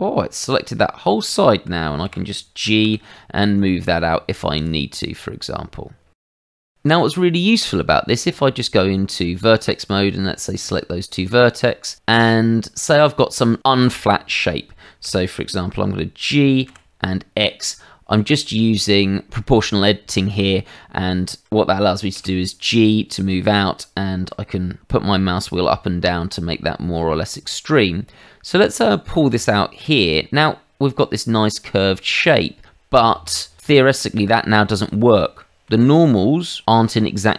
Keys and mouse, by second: 1.3 shift+middle click, 2.0 g, 2.8 x, 4.5 click, 6.1 shift+middle click, 8.1 Tab, 9.8 click, 11.8 click, 12.1 click, 15.0 g, 16.6 x, 18.2 Escape, 22.1 g, 30.0 click, 30.4 middle click, 32.7 Tab, 33.6 click, 34.1 middle click, 35.3 shift+middle click, 36.6 middle click.